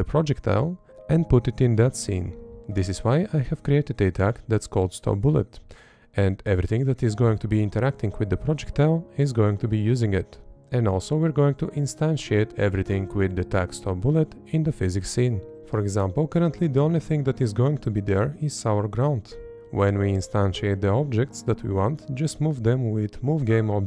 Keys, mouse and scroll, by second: 0.9 Up, 2.0 Up, 2.9 Up, 3.8 Up, 4.5 Right, 4.9 Up, 5.4 Up, 5.9 Up, 6.2 Left, 6.5 Up, 6.9 Up, 7.3 Up, 7.9 Right, 8.3 Up, 8.8 Up, 9.2 Up, 10.8 Up, 11.7 Up, 12.3 Up, 13.6 Left, 13.8 Up, 14.7 Right, 14.9 Up, 15.3 Left, 16.3 Right, 16.5 Up, 18.9 Up, 19.4 Up, 19.8 Up, 20.2 Up, 20.6 Up, 23.5 Left.